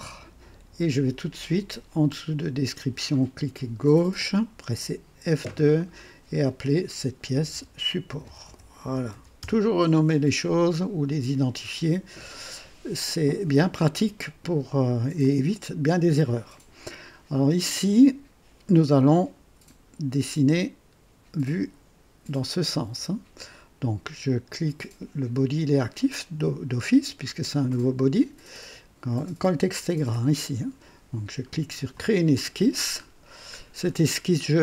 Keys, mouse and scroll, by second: 3.7 click, 5.2 F2, 7.0-9.8 typing, 15.1-15.9 drag, 31.9 click, 33.0-33.4 scroll down 2, 33.8 scroll up 2.